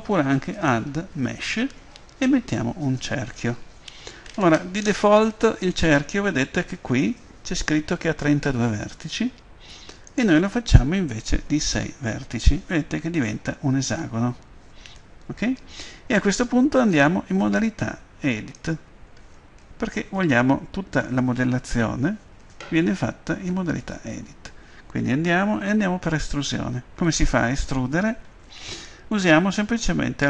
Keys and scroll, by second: 11.4 6, 16.2 Tab.